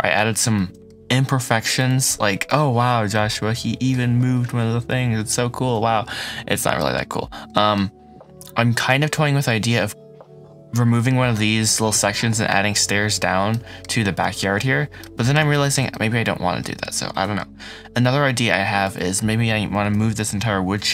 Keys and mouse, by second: 0.5 shift+drag.